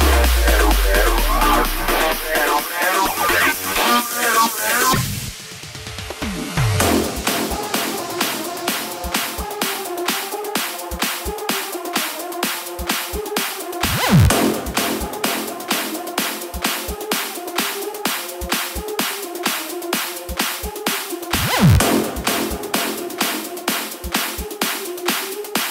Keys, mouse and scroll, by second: 0.4 click, 1.7 click, 3.0 KP_0, 4.8 click, 5.2-5.8 scroll down 1, 5.8 shift+middle click, 6.6 click, 6.8 ctrl+s, 8.2-8.7 scroll down 2, 8.7 scroll up 1, 12.0-15.5 drag, 16.5 click, 17.6 ctrl+s, 17.8 ctrl+s, 18.0 ctrl+s, 18.3-18.8 ctrl+s, 19.2 scroll down 1, 22.4-25.7 drag.